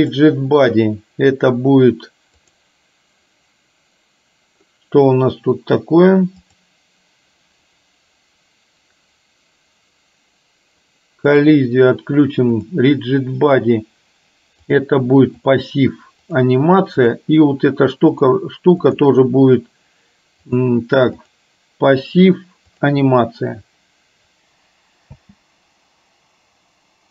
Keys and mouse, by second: 2.6 click, 6.4 click, 11.4 click, 14.8 click, 16.3 click, 17.1 click, 18.2 click, 18.9 click, 20.7 click, 22.8 click, 25.1 space.